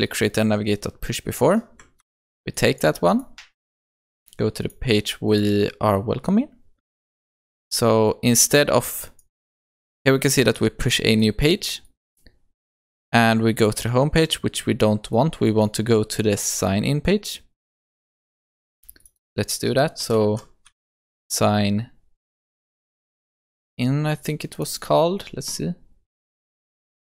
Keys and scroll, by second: 2.0 ctrl+c, 7.4 ctrl+v.